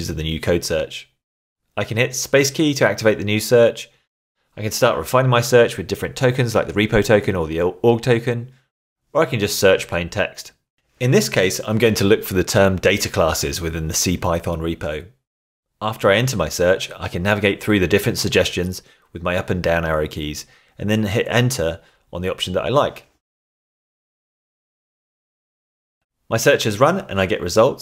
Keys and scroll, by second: 2.6 space, 12.6-15.7 typing, 17.9 Down, 19.1 Down, 21.0 Up, 23.3 Return, 27.1 Tab.